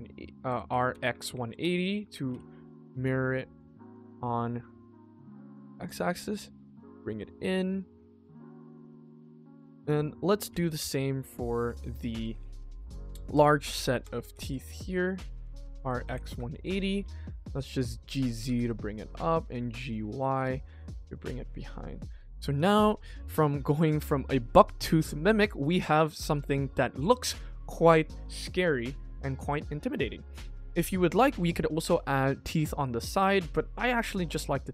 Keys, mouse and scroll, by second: 3.2-4.3 middle drag, 4.5-4.8 scroll down 2, 5.0 shift+middle click, 5.3 g, 7.0 middle click, 8.5 middle click, 8.8 g, 10.0 click, 10.4 shift+d, 11.6 r, 17.9 middle click, 18.3 g, 20.3 click, 20.5-21.8 middle drag, 22.2 middle click, 22.5 ctrl+s, 22.8 middle click, 23.2 shift+middle click, 23.6 middle click, 25.1 shift+middle click, 26.0 middle click, 26.7 middle drag, 27.1 ctrl+s, 27.3-27.7 scroll up 1, 27.7-28.0 middle drag, 29.0-30.2 middle drag, 30.2-30.6 scroll down 2, 30.6 middle click, 31.2 scroll up 2, 31.3 middle click, 33.4 middle click, 33.8-34.2 scroll down 1, 34.2 middle click, 34.5 middle click.